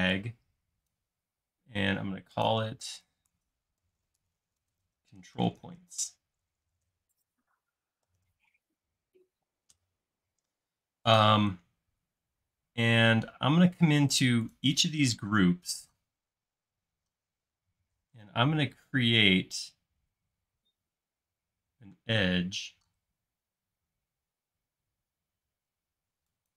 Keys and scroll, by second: 3.5-8.8 typing, 9.7 Return, 17.8 shift+q, 23.0 i.